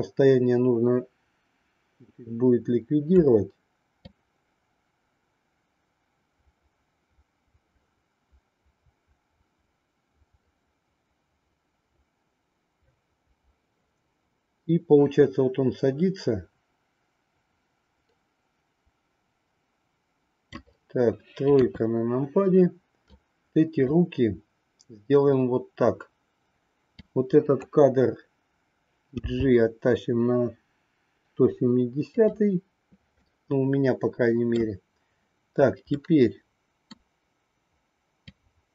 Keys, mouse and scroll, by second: 4.1-20.7 drag, 21.5 KP_3, 23.0-24.0 drag, 27.0 click, 29.1 g, 33.2-34.8 middle drag, 36.0-37.0 middle drag, 38.3-38.7 drag.